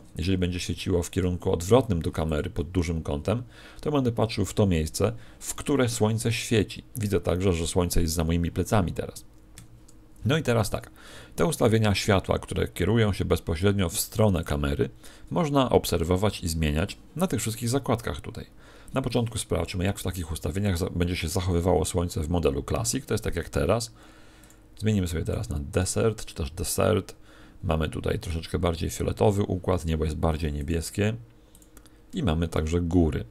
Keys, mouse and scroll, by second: 0.2 r, 2.3 click, 9.5 Escape, 10.7 r, 14.3 click.